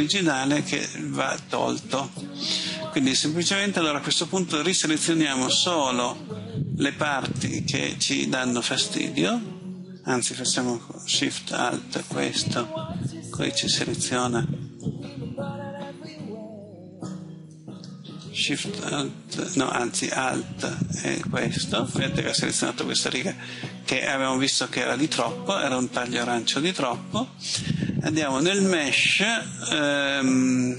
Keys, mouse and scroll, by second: 7.5 right click, 8.9 shift+right click, 21.3 alt+right click, 22.6 middle click, 28.4 click.